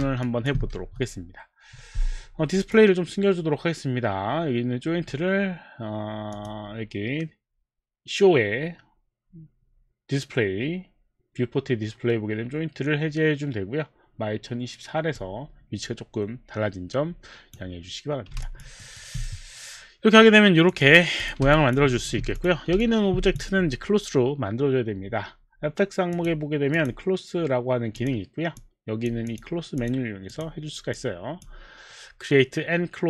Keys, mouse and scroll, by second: 0.3 alt+click, 1.0 Escape, 1.0 alt+click, 2.6 click, 6.3 click, 15.2 click, 18.5 alt+click, 18.8 alt+right click, 20.7 click, 21.4 click, 21.5 alt+click, 22.7 alt+Escape, 23.1 alt+click, 26.1 click, 26.8 click, 28.0 click, 28.6 click, 29.3 click, 30.2 click, 30.3 click, 30.9 click.